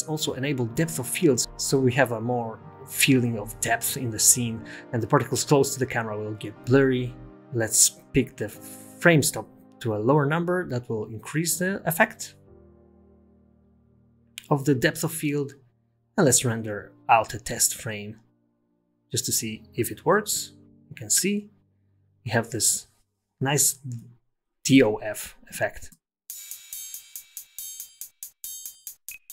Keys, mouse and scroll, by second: 0.4 click, 1.7 click, 3.7-4.5 scroll up 7, 4.9 scroll down 3, 6.5 click, 7.4 click.